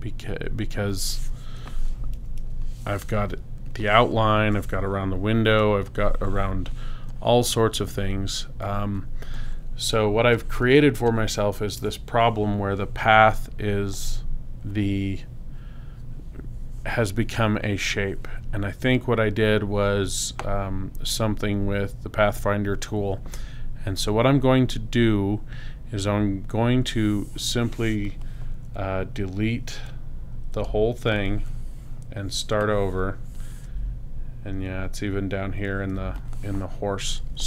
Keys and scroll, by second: 2.1 super+-, 4.1 space, 5.6 space, 35.9 space.